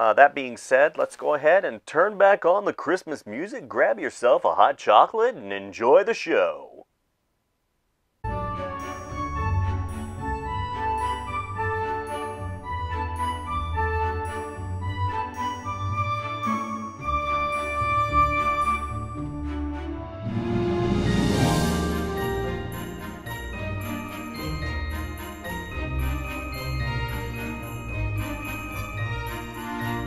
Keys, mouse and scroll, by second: 1.1 space, 1.6 space, 2.9 space, 3.9 space, 4.4 ctrl+s, 5.1 space, 5.7 space, 6.3 space, 6.7 space, 8.2 space, 8.8 space, 10.4 space, 11.1 space, 12.1 space, 13.4-20.0 typing, 21.1 space, 21.8 space, 22.7 space, 23.5 space, 23.9 ctrl+s, 25.0 space, 28.2 space, 28.9 space, 29.6 space, 29.9 space.